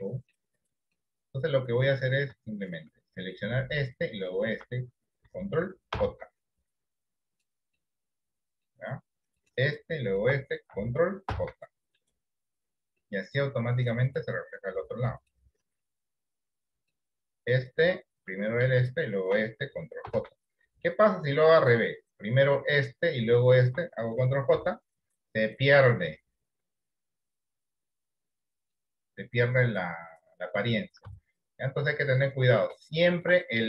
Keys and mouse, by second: 0.2 middle click, 6.1 ctrl+j, 7.9 middle click, 11.5 ctrl+j, 13.2-14.2 middle drag, 15.5 middle click, 20.4 ctrl+j, 24.7 ctrl+j, 25.7-28.9 middle drag, 31.2 ctrl+z, 31.7 middle click, 33.1 shift+middle click.